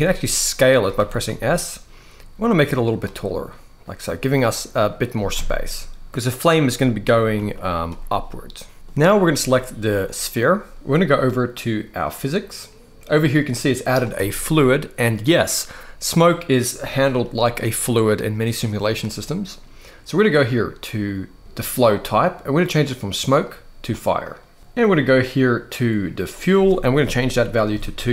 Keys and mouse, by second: 0.7 g, 0.9 z, 4.1 middle click, 4.8 s, 5.0 z, 6.1-7.1 typing, 9.7 click, 22.6-23.8 drag, 26.0-28.1 drag.